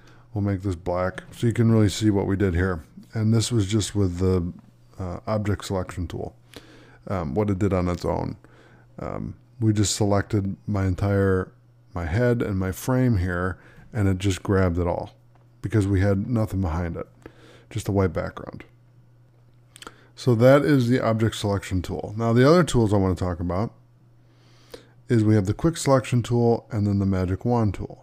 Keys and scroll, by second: 23.6 space.